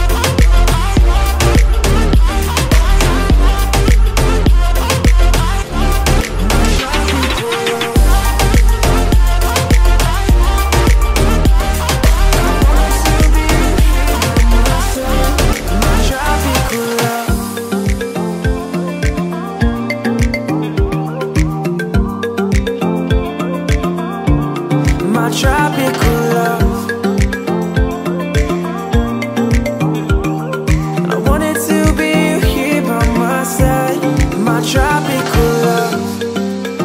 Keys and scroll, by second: 7.3 ctrl+c, 7.5 Tab, 7.6 space, 8.5 ctrl+j, 9.6 ctrl+v, 10.2 ctrl+a, 15.0 Return, 36.6 Return.